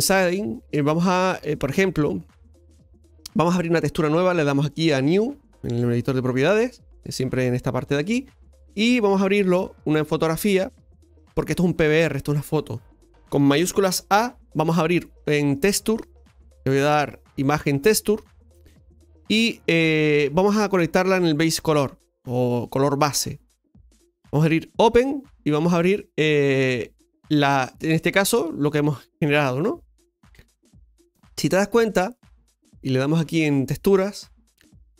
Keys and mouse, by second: 6.5 click, 8.7 middle click, 9.5-11.0 middle drag, 11.0 click, 21.1-22.6 drag, 24.0 click, 31.7-32.2 middle drag, 34.2-34.9 middle drag.